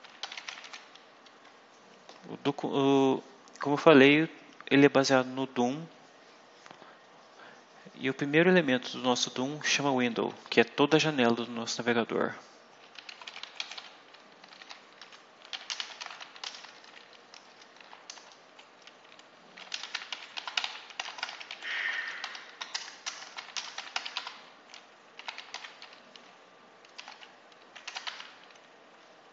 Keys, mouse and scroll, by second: 0.0-1.0 typing, 12.7-17.7 typing, 18.1 shift+Return, 19.1-28.0 typing, 29.2-29.3 typing.